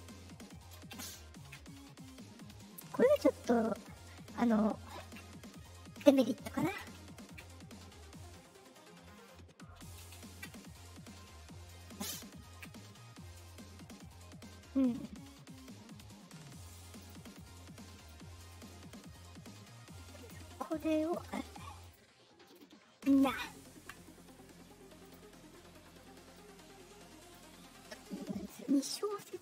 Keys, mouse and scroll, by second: 1.6 middle click, 2.3 middle click, 2.7 middle click, 3.5 middle click, 4.0 middle click, 5.2 middle click, 5.9 middle click, 6.4 middle click, 7.5 middle click, 10.5 middle click, 10.8 middle click, 11.6 middle click, 12.6 middle click, 12.9 middle click, 13.4 middle click, 14.1 middle click, 16.6 click, 16.9 click, 17.3 click, 18.6 scroll down 2, 20.1 click, 20.6 click, 21.0 right click, 21.7 click, 22.4 right click, 23.9 middle click, 25.0 click, 26.3 click, 27.5 middle click, 28.9 click.